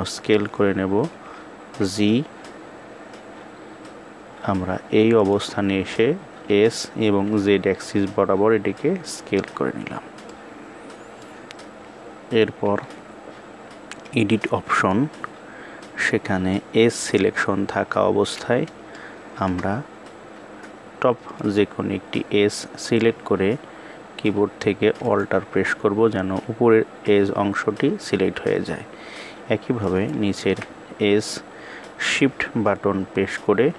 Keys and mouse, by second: 6.7 s, 10.0-10.9 middle drag, 12.3 KP_1, 13.8 click, 18.6 shift+middle click, 24.8 alt+click, 29.5 alt+click.